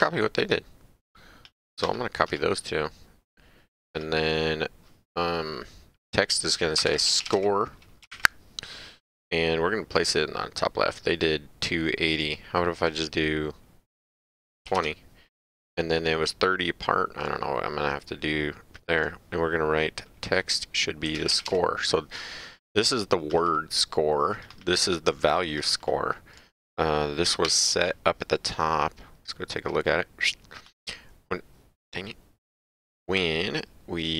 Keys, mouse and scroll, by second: 0.0 click, 1.8 ctrl+c, 2.2 ctrl+v, 3.9 click, 6.6-8.1 typing, 12.1 click, 14.6 KP_2, 14.7 KP_0, 17.2 click, 19.0 click, 20.8-21.9 typing, 23.3 click, 27.4 Page_Up, 29.6 click, 32.4 click.